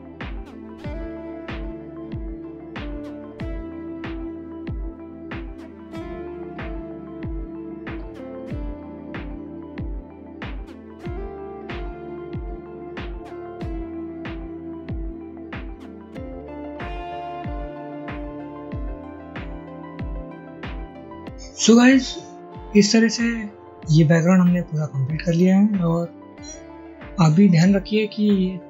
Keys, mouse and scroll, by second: 2.3 ctrl+y, 3.0 ctrl+y, 5.1 alt+click, 7.2 shift+click, 8.0 double click, 9.6 shift+click, 9.9 shift+click, 10.2 ctrl+z, 10.5 a, 11.5 ctrl+y, 12.7 ctrl+z, 12.8 shift+double click, 13.1 alt+click, 14.5 shift+click, 15.7 ctrl+z, 17.6 Delete, 17.8 a, 18.5 ctrl+y, 18.9 ctrl+y, 19.3 shift+double click, 19.3 alt+click, 20.5 ctrl+y.